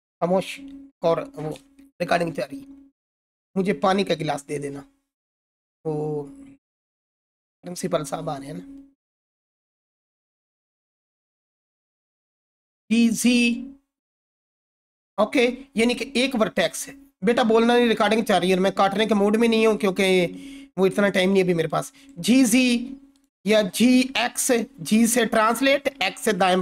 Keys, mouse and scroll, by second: 12.7-13.7 typing, 14.9 right click, 18.6-19.2 drag, 21.9 g, 22.1 z, 23.1 right click, 23.4-24.5 typing, 26.5 right click.